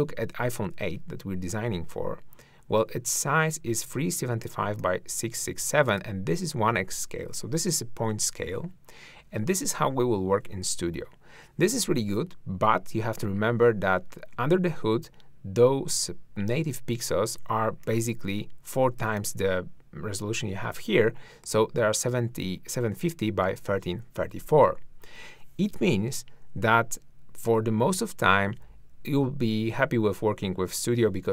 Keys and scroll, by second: 28.2 ctrl+Left.